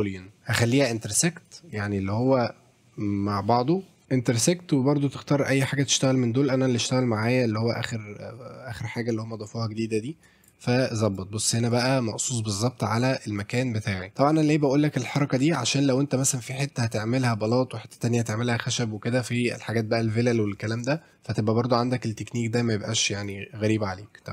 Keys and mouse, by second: 1.4 click, 10.4 click, 11.2-11.8 drag, 11.7 right click, 13.1-14.0 middle drag, 14.2 middle click, 23.3 click.